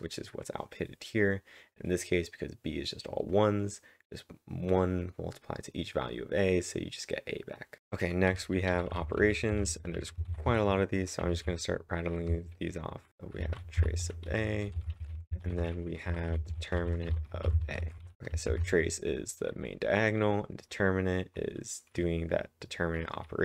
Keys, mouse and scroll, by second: 7.8 ctrl+/, 7.8 ctrl+j, 7.8 ctrl+v, 7.8-11.8 typing, 8.3 ctrl+/, 8.3 ctrl+j, 8.8 ctrl+/, 8.8 ctrl+j, 13.1-18.6 typing.